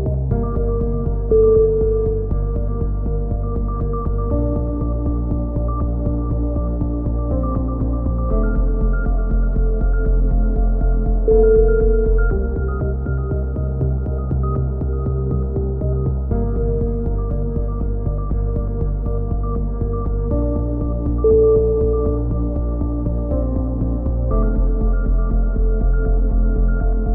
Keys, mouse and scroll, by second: 0.6 z, 1.0 z, 1.6-2.1 scroll up 1, 2.9-4.0 drag, 3.2 right click, 4.0-5.1 right drag, 4.9 click, 6.8 right click, 7.3 click, 8.2 middle click, 8.6 middle click, 9.0 z, 9.2 z, 9.8 middle click, 10.4 a, 11.4 z, 11.8 click, 12.6-13.8 middle drag, 13.8 right click, 14.2 alt+m, 14.9-16.2 right drag, 16.0 alt+m, 16.4 a, 16.6 z, 16.9 z, 17.2 click, 17.7 click, 20.3 ctrl+KP_7, 20.6 z, 21.1 click, 22.3 z, 23.0-24.1 middle drag, 24.1 KP_3, 24.7-25.9 middle drag, 26.7 click.